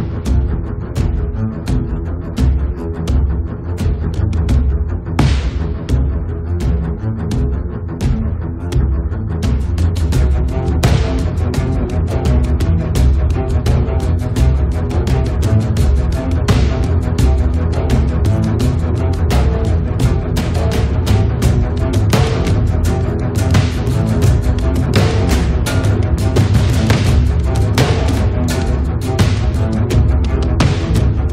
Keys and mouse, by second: 0.4 click, 1.3 middle click, 1.8-2.9 drag, 2.7 right click, 2.9 middle click, 3.4-4.9 drag, 3.4-4.4 right drag, 4.4 middle click, 4.6 right click, 4.8 right click, 4.9 middle click, 5.8 middle click, 6.2 KP_7, 7.3 middle click, 7.5 click, 7.9 f, 8.5 click, 8.5 middle click, 8.5 right click, 9.4 middle click, 9.8 click, 10.6 middle click, 11.0 click, 11.5 right click, 12.8 f, 12.9-14.7 middle drag, 14.3 click, 14.9-17.5 middle drag, 17.5 click, 18.2 f, 18.6 click, 19.8 click, 19.8 right click, 20.5 middle click, 20.6 click, 21.2 middle click, 21.8 click, 22.5 middle click, 23.2-27.4 drag, 27.9-29.6 drag, 29.5 1, 29.7 f, 30.4-31.3 drag.